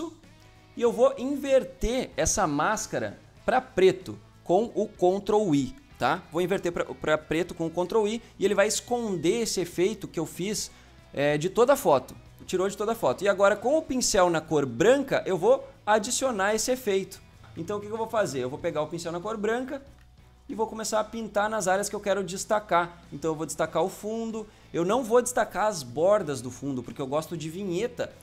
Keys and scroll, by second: 0.5 typing, 7.4 ctrl+i, 17.8 ctrl+z.